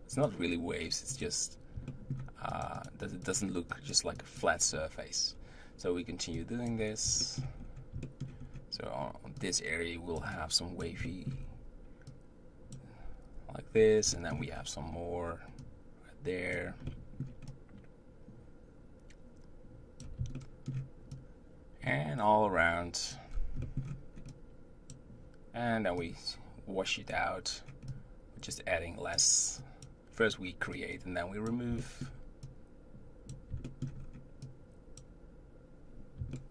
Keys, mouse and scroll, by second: 0.2-1.5 drag, 1.9 shift+middle click, 2.6-5.3 drag, 5.3-6.3 scroll down 2, 6.3 click, 7.2 shift+middle click, 7.6-9.4 scroll up 3, 8.0 shift+middle click, 9.4-11.1 drag, 11.1 shift+middle click, 11.4-12.1 scroll up 1, 12.1-13.7 drag, 13.7-14.1 scroll down 2, 14.1 shift+middle click, 14.3 scroll up 1, 14.5-15.1 scroll down 4, 15.1-15.6 scroll up 2, 15.6-16.8 drag, 16.8 shift+middle click, 17.5-20.4 drag, 20.4 shift+middle click, 21.2-23.3 drag, 23.3-23.6 scroll down 2, 23.6 shift+middle click, 24.3-31.8 drag, 31.8 shift+middle click, 32.5-33.7 drag, 33.7 shift+middle click, 34.0-34.5 scroll up 2, 34.5-36.3 drag, 36.3 shift+middle click.